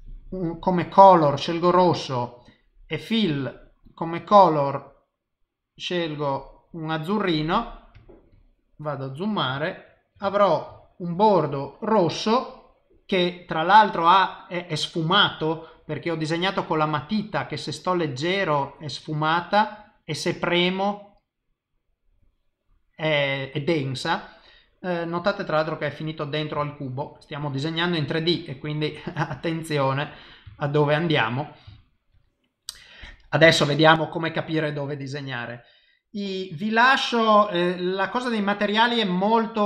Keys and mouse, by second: 2.5 click, 8.4 ctrl+middle click, 9.6 shift+middle click, 10.3 ctrl+middle click, 10.7 shift+middle click, 16.6 click, 19.8 click, 25.1 middle click, 26.6 shift+middle click, 27.1 middle click, 28.8 click, 30.5 shift+middle click, 31.1 middle click, 31.7 shift+middle click, 32.2 middle click, 33.5 ctrl+middle click, 34.1 middle click.